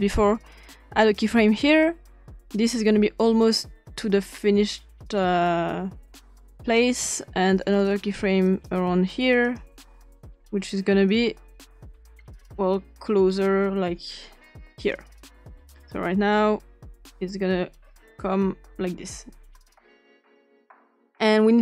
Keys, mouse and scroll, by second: 1.0 click, 2.5-6.8 drag, 7.8 click, 8.5 click, 9.4 click, 11.0-15.0 drag, 15.6-20.2 drag.